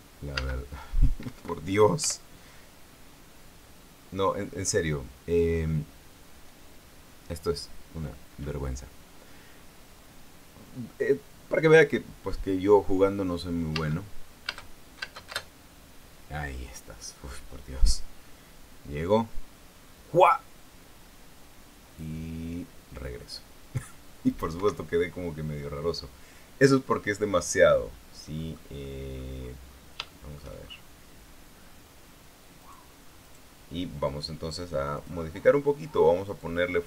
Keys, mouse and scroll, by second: 2.0 Escape, 2.9 p, 14.5 space, 15.2 space, 25.3 Escape, 29.1 middle click, 29.5 middle click, 30.0-30.6 scroll down 1, 30.6 scroll down 1, 30.7 shift+middle click, 31.3-32.2 shift+scroll up 1, 32.2-33.3 scroll down 1, 33.3 right click, 33.9 right click, 35.7 click.